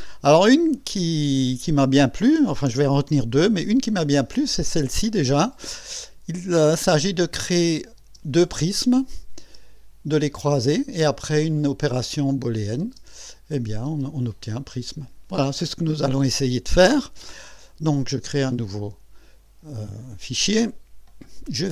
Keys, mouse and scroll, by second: 7.5 click, 8.0 space, 9.1 click, 9.4 space, 12.3 click, 12.8 space, 13.6 click, 13.9 space, 17.9 click.